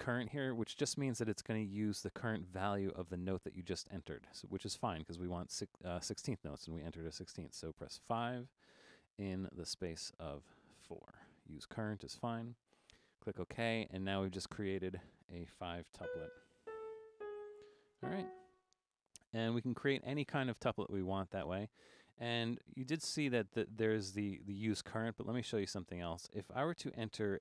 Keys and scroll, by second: 8.0 5, 10.9 4, 16.0-18.0 typing, 23.1 5.